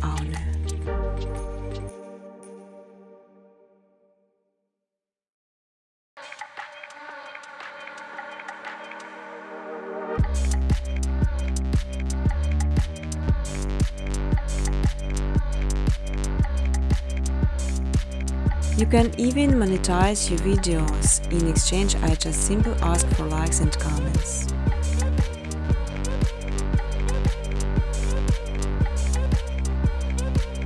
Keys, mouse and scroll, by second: 1.6 middle click, 1.6 middle click, 1.7 middle click, 4.1 scroll, 4.5 space, 5.2 space, 5.8-6.7 scroll, 13.2 middle click, 14.7 middle click, 14.7 middle click, 15.0 middle click, 15.0 middle click, 17.0 middle click, 17.0 click, 18.5-19.9 typing, 21.5 Return, 26.4 click, 26.9-28.3 typing, 29.1 Return, 30.3 middle click.